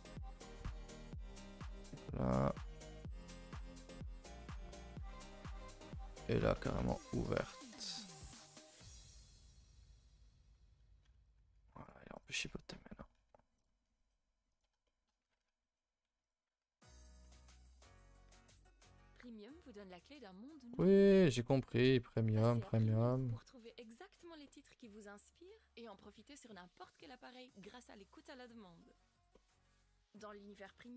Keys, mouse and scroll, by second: 11.2 click, 12.1 click, 14.5 click, 14.8-16.2 middle drag, 16.2 click, 21.1 middle click, 21.9-22.8 scroll up 5, 22.8 x, 23.6 KP_0, 25.3 click, 29.3 middle click, 29.7 z, 30.5-30.9 scroll up 9, 30.8 shift+middle drag.